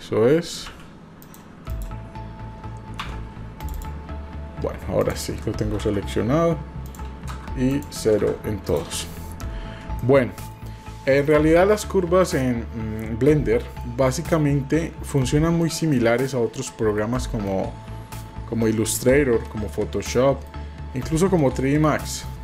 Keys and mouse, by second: 0.6 g, 1.8 click, 3.7 click, 6.8 click, 7.9 click, 8.6 click, 9.9-10.5 shift+middle drag, 13.2-13.8 middle drag, 14.0-15.1 middle drag, 15.6-15.9 shift+middle drag, 16.3-16.9 middle drag, 17.1 shift+middle click, 18.6-18.9 shift+middle drag, 19.6 middle click, 21.9 middle click.